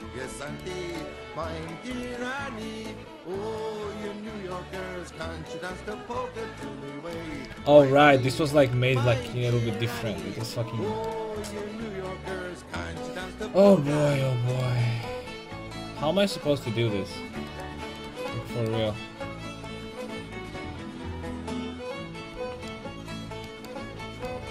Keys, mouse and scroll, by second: 0.1 a, 0.6-2.4 right drag, 1.9 x, 6.0-7.2 middle drag, 7.3 ctrl+z, 12.6 x, 17.5 right click, 19.7-21.5 drag, 19.7 right click, 21.3 a, 22.4 ctrl+z, 22.7 middle click, 23.4 middle click, 23.9 ctrl+z.